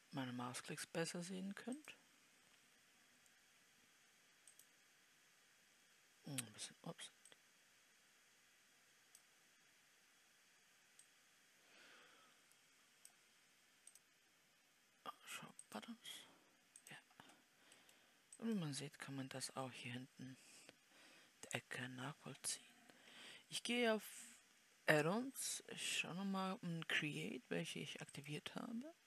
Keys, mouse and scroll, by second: 16.2-18.2 drag, 18.2 middle click, 18.9-29.0 right drag.